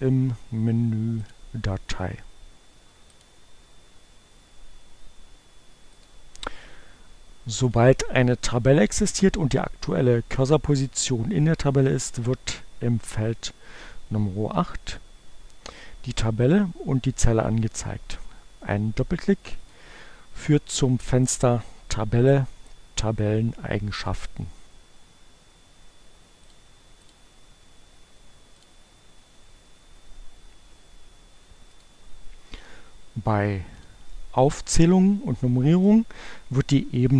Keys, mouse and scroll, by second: 1.3 click, 2.8 click, 6.0 click, 7.0 click, 19.0-20.0 drag, 24.0 click, 26.5 click, 27.0 click, 28.4 click, 31.8 click, 33.8 click.